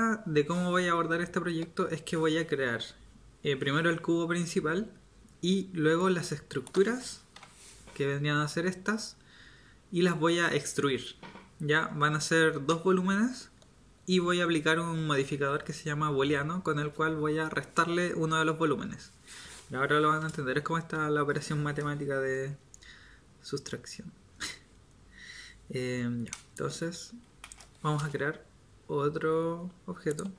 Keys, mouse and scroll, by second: 7.3 KP_7, 27.4 shift+a.